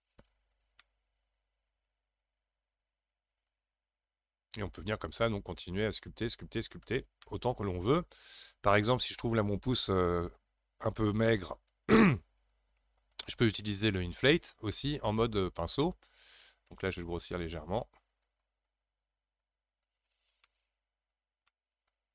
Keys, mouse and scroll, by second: 0.1-0.6 scroll down 6, 0.8-3.8 middle drag, 7.2-10.3 shift+middle drag, 13.9 click, 14.7 middle click, 15.4-16.4 scroll up 1, 16.4 f, 17.2 f, 18.2-20.4 drag, 20.4-22.1 middle drag.